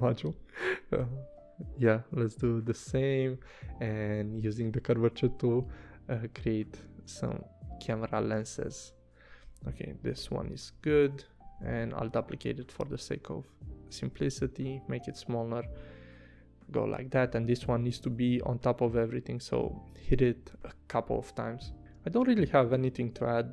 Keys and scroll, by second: 1.0 a, 10.2 i, 10.7 v, 17.0 super+].